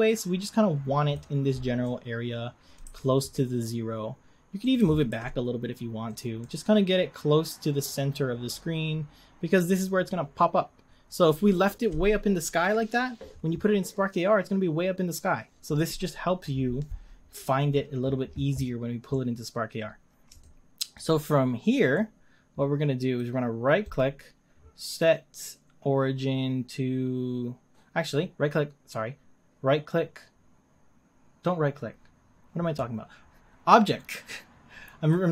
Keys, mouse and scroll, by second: 1.2-1.8 scroll down 4, 1.8-2.8 middle drag, 2.8 g, 4.8 g, 6.6-9.5 middle drag, 19.3-20.4 scroll up 3, 20.4-21.0 shift+middle drag, 21.0-22.0 scroll up 3, 22.0-31.8 middle drag, 31.8-35.3 scroll down 2.